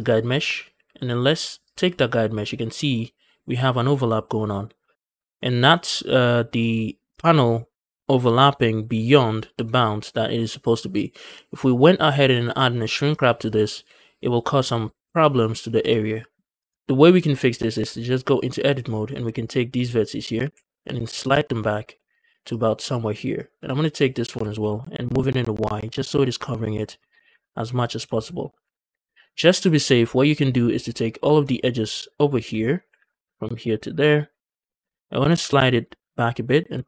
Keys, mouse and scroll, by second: 0.0-1.6 drag, 5.6-6.9 scroll down 2, 6.9 click, 7.3-8.9 scroll up 2, 16.4 click, 17.7 Tab, 18.7 click, 19.3 shift+click, 20.2 g, 20.4 g, 22.6 shift+click, 23.2 click, 23.6 shift+click, 24.1 g, 24.6 y, 26.8 shift+click, 27.2 Tab, 27.8 scroll down 1, 28.0 shift+middle drag, 28.6 Tab, 28.7 scroll down 2, 28.9 shift+middle click, 29.1 scroll up 1, 29.4 a, 29.9 click, 30.3 scroll down 2, 30.6 shift+middle click, 30.8 scroll up 2, 31.1 shift+middle click, 31.9 ctrl+click, 32.2 scroll down 2, 32.4 shift+middle click, 32.6 scroll up 2, 32.9 ctrl+z, 33.3 ctrl+click, 33.8 scroll down 2, 34.0 shift+middle click, 34.2-35.1 scroll up 4, 34.5 shift+middle click, 35.1 g, 35.4 g, 36.7 c.